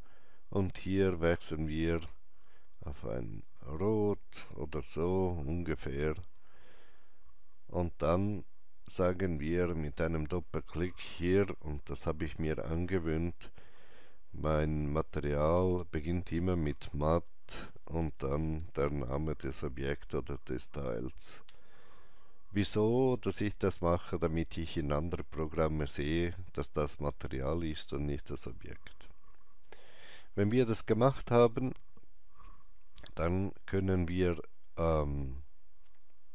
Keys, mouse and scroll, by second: 0.9 click, 2.4-6.9 drag, 9.4-12.0 drag, 15.0-16.2 typing, 15.2-17.7 drag, 17.7-19.9 typing, 21.5 Return.